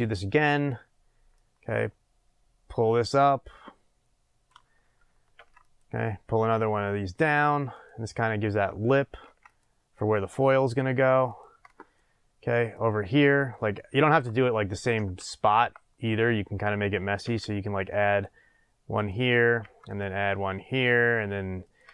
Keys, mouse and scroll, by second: 0.7 click, 1.3-7.8 drag, 5.3 ctrl+r, 9.2 ctrl+r, 11.4 click, 11.9-16.4 middle drag, 13.0-13.5 scroll down 2, 16.0 scroll up 1, 17.2 ctrl+r, 19.0 click, 19.6 ctrl+r, 21.7 click.